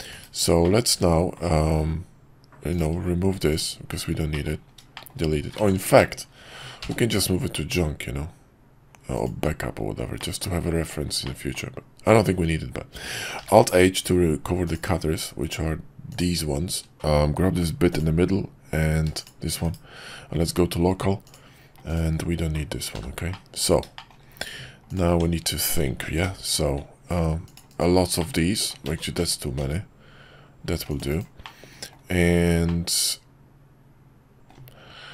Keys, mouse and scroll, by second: 0.1 /, 0.6-1.4 middle drag, 2.7 click, 4.3 middle drag, 4.9 shift+middle click, 5.7 ctrl+z, 6.8 m, 10.2 middle click, 11.2 middle click, 13.4 alt+h, 17.0 middle click, 23.3-23.7 middle drag, 24.0 shift+middle click, 25.1 Tab, 26.2 ctrl+r, 28.2 middle click, 28.8 ctrl+z, 29.6 ctrl+r, 31.5 middle click, 32.7-34.5 middle drag.